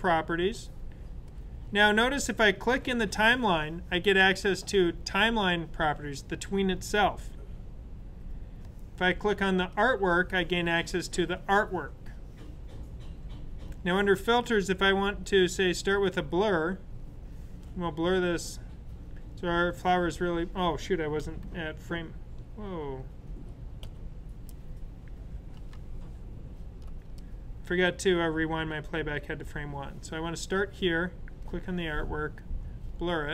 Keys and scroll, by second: 21.7 super+z, 23.8 Escape, 25.7 super+z.